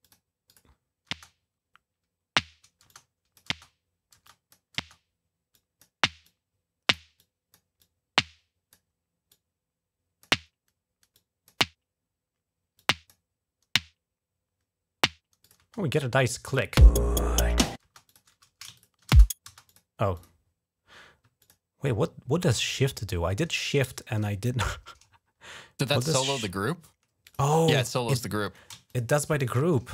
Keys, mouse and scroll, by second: 0.3 click, 0.9 space, 2.7 click, 2.7-4.6 typing, 4.1 click, 5.3 click, 6.0 click, 7.0 click, 7.6 click, 9.1 click, 10.9 click, 12.6 click, 15.2 click, 15.4 space, 16.3 click, 16.6 space, 17.6 space, 17.9 click, 18.6 shift+click, 19.1-19.8 typing, 19.5 click, 19.9 click, 21.3 shift+click, 24.8-25.2 scroll down 4, 26.2 shift+click, 27.0 shift+click, 28.7 shift+click, 29.3 shift+click, 29.7 scroll up 1.